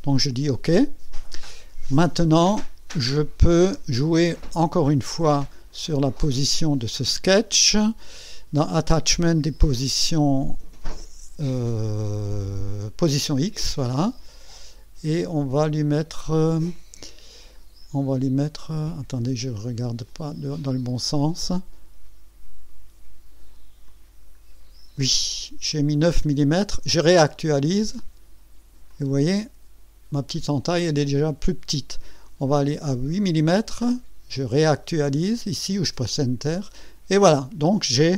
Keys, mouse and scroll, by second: 0.1 click, 1.3-2.4 drag, 3.2 click, 3.6 space, 5.0 click, 5.7 click, 6.3 space, 10.4 click, 14.3 scroll down 2, 15.1 scroll up 2, 17.7 scroll down 2, 18.5 scroll up 2, 19.2 click, 20.1 click, 22.1 scroll down 2, 22.6 scroll up 2, 23.8 click, 24.4 scroll down 2, 27.7 click, 28.9 click, 30.1 click, 32.2 click, 32.9 scroll down 1, 35.6 click.